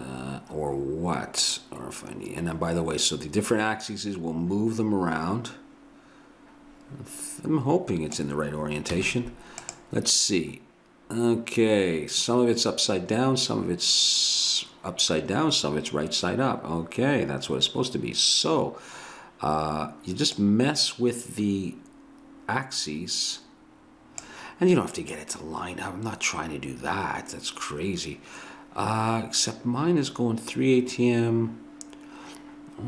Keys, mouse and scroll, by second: 1.5 middle click, 9.0 z, 20.4-22.4 drag, 25.2-27.2 drag.